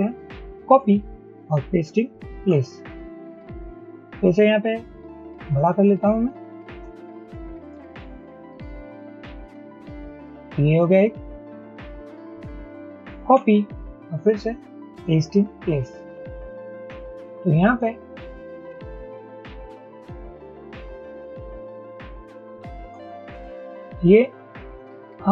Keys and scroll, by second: 0.7 ctrl+c, 2.4 ctrl+shift+v, 5.3 shift+Up, 8.2 shift+Down, 8.6 shift+Down, 9.0 shift+Down, 9.6 shift+Down, 13.4 ctrl+c, 15.6 ctrl+shift+v, 18.2 shift+Up, 19.9 shift+Up, 20.1 shift+Up, 20.3 shift+Up, 20.7 shift+Up, 22.6 shift+Down.